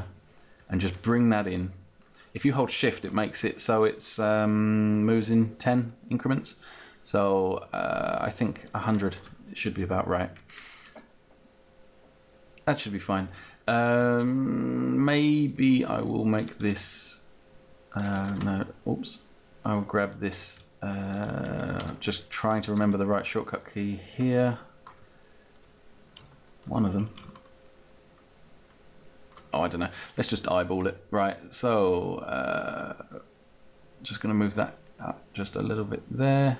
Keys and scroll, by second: 18.3 ctrl+z, 21.7 ctrl+z.